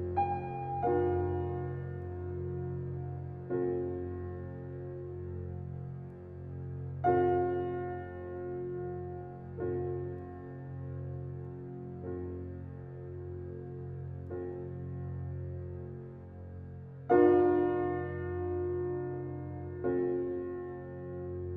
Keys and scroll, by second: 0.6 Left, 2.9 Left, 4.5 Left, 5.8 Left, 7.3 Left, 9.6 Left, 11.0 Left, 13.0 Left, 14.4 Left, 15.7 Left, 17.2 Left, 18.4 Left, 20.5 Left.